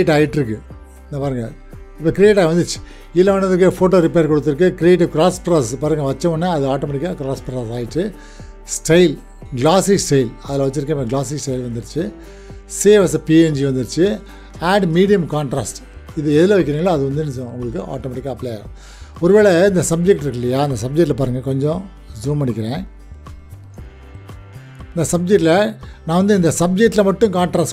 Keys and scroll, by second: 22.4 ctrl+w, 23.3 ctrl+=.